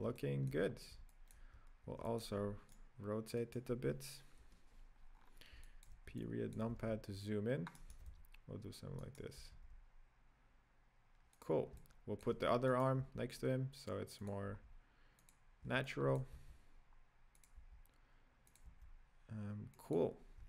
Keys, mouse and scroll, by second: 0.2-0.7 shift+middle drag, 0.7-1.1 scroll up 1, 1.1-3.0 shift+middle drag, 3.0 right click, 3.7 right click, 4.5 KP_Decimal, 5.3-5.7 scroll down 6, 5.7-6.3 shift+middle drag, 6.3-7.0 drag, 7.0 r, 8.4 r, 9.7 r, 11.9-13.0 shift+middle drag, 13.0 right click, 13.3 g, 14.8 r, 15.9-16.4 shift+middle drag, 16.4 g, 18.0 r, 19.1 g.